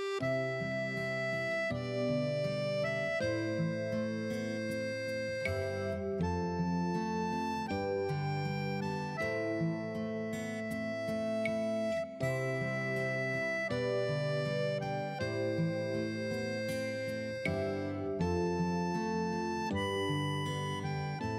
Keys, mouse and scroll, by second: 9.2 right click, 9.7 click, 11.0 F8, 13.7 scroll down 1, 16.0 click, 18.6 w.